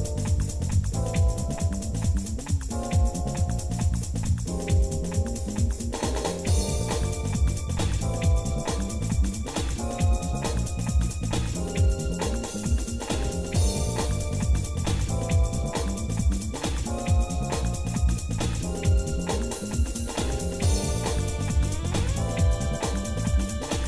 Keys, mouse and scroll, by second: 0.7-1.8 shift+middle drag, 2.0-6.6 shift+middle drag, 6.9 middle click, 7.9 Tab, 8.1 click, 8.4 Tab, 9.1 shift+middle click, 9.7 click, 10.7 shift+middle click, 11.5 shift+click, 12.2 shift+middle click, 15.0 i, 20.3 shift+middle click, 21.4 scroll up 1, 22.0-22.4 scroll up 3, 22.4 scroll down 1.